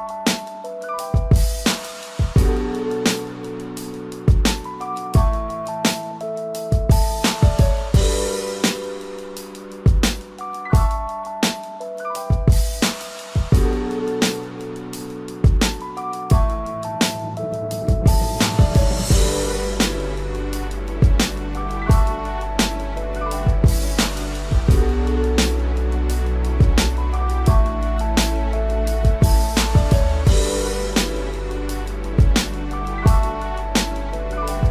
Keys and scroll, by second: 1.2 ctrl+0, 11.5 ctrl+=.